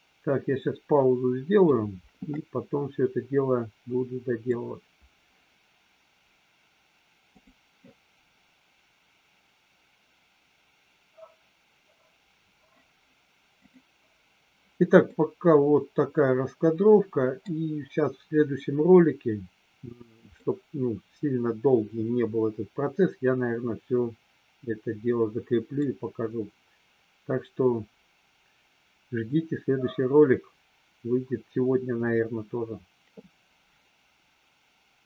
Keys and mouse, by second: 2.4-4.5 middle drag, 15.1-17.5 middle drag, 20.4-25.7 middle drag.